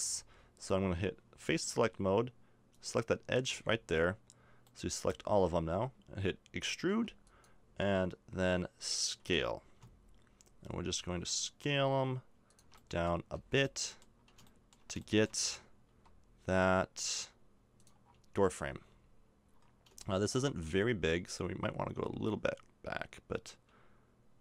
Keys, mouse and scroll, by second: 2.7-4.0 right drag, 4.0-6.5 middle drag, 6.9 e, 9.2 s, 13.3 z, 13.6 middle click, 13.8 middle click, 13.9 middle click, 15.9 s, 18.0 middle click, 19.7-24.2 middle drag, 21.0 s.